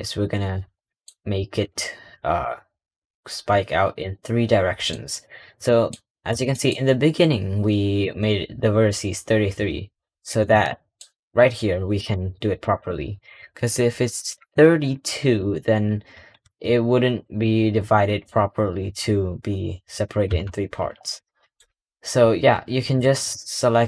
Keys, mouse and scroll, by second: 0.7 middle drag, 1.5 Tab, 2.0 middle click, 2.4-3.3 scroll down 3, 3.3 scroll down 1, 4.9 scroll up 3, 5.5 middle click, 6.4 middle drag, 7.9 click, 10.3 h, 11.9 click, 12.5 click, 14.0 click, 21.0-23.2 middle drag, 23.8 click.